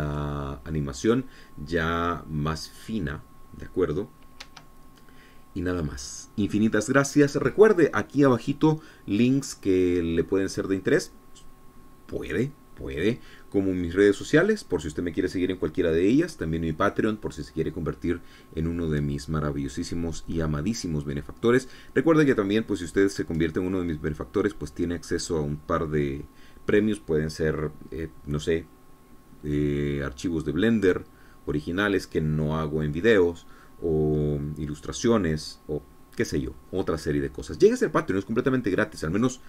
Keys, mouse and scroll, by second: 6.1 Escape.